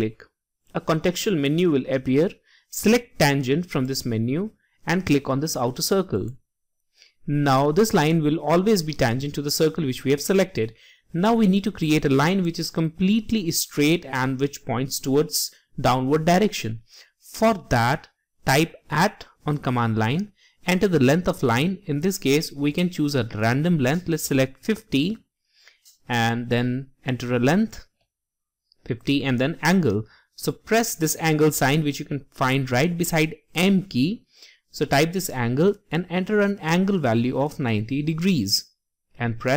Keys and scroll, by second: 17.9 typing.